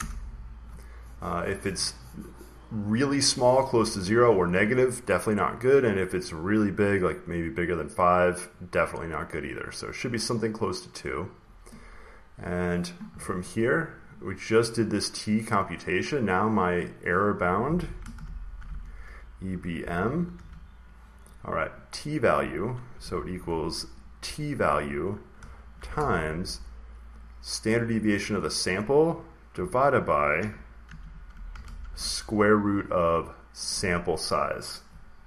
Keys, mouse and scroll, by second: 9.2 click, 10.9 click, 14.0 click, 15.0 click, 16.0 click, 17.2 click, 17.9-19.7 typing, 20.2 Right, 22.8 typing, 23.9-27.4 drag, 25.6 typing, 26.8 typing, 27.9-29.2 drag, 29.4-32.2 typing, 33.6 click.